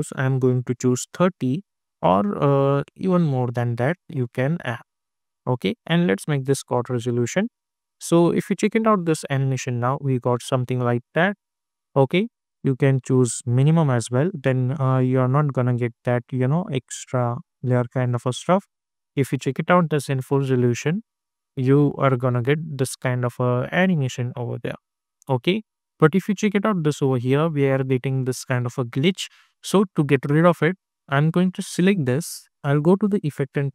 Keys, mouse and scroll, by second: 0.7 Return, 3.1-5.7 drag, 7.4 click, 7.5 space, 9.8 space, 10.9 click, 14.8 space, 17.2 click, 20.8 click, 25.9-26.2 scroll up 1, 29.4-30.0 scroll down 1, 30.0 scroll up 1, 31.7 click, 33.4 ctrl+a.